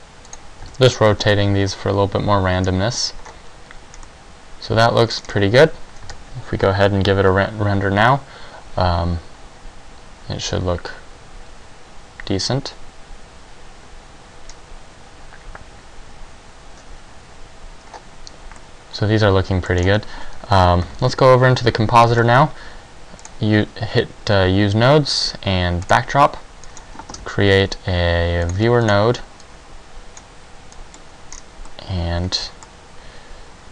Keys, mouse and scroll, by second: 0.5 click, 0.8 a, 2.7 scroll down 1, 3.3-4.1 scroll up 2, 4.1 middle click, 5.3 scroll down 3, 6.2 KP_0, 20.1 Escape, 20.1 middle click, 20.1 scroll down 2, 20.8 ctrl+Left, 23.4 click, 30.4 click, 30.4 g.